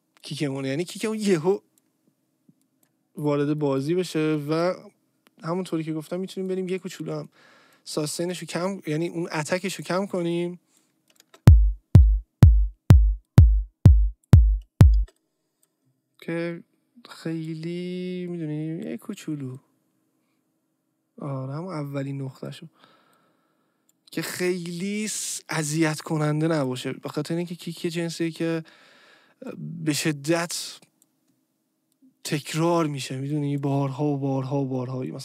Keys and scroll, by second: 0.3 Delete, 11.2 space, 14.9 space.